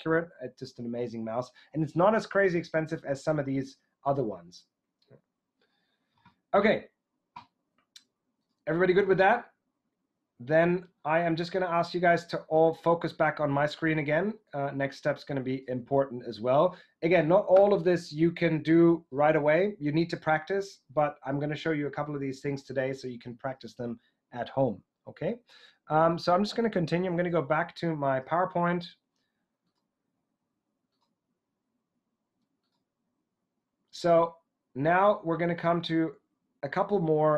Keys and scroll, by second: 27.1 super+Tab.